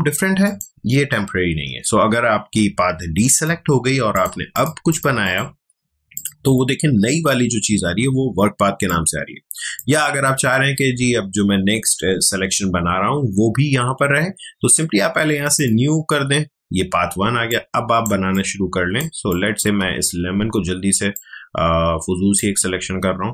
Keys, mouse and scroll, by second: 0.4 click, 3.3 click, 8.8-12.1 drag, 15.5 click, 17.2 ctrl+space, 17.5 ctrl+click, 17.7 ctrl+space, 18.3 click, 18.6 space, 19.3 ctrl+click, 21.1-23.3 drag.